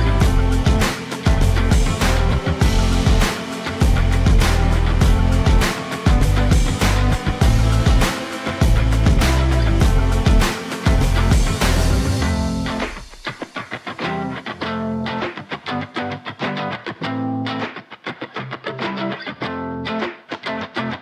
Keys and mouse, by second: 0.2-1.4 drag, 1.6 middle click, 2.6 shift+middle click, 6.1 click, 7.1 middle click, 7.5 middle click, 8.3 middle click, 8.6 middle click, 9.1 middle click, 9.4 middle click, 9.9 shift+middle click, 10.7 shift+middle click, 11.8 x, 13.2 click, 14.1 shift+middle click, 15.2 shift+middle click, 15.9 shift+a, 18.3 middle click, 18.7 Tab, 19.4 shift+middle click, 19.8 1.